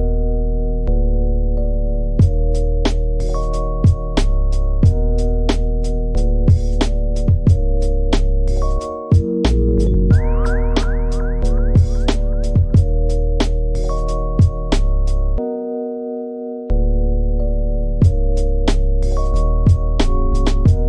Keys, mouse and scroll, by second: 0.8 click, 1.0 shift+click, 1.5 click, 1.9 click, 2.1 g, 2.6 s, 3.4 click, 3.5 e, 4.4 e, 5.4 click, 5.6 s, 6.5 a, 6.7 g, 7.1-7.7 scroll down 2, 7.7 click, 8.3 e, 9.9 click, 10.3 Tab, 10.4 right click, 11.0 scroll up 1, 11.2 middle click, 11.9 click, 12.2 click, 12.8 click, 12.9 click, 13.3 KP_3, 14.3 click, 14.5 s, 15.0 click, 15.1 s, 15.5 click, 15.7 s, 16.4 ctrl+a, 17.2 ctrl+z, 18.3 ctrl+a, 19.0 shift+click, 20.0-20.8 drag.